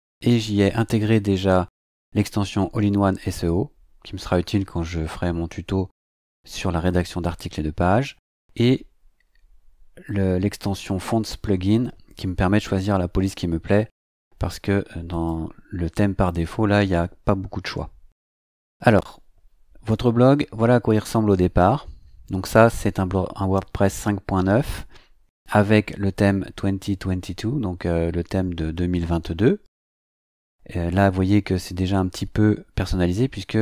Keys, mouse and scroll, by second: 15.1 click, 20.9 click.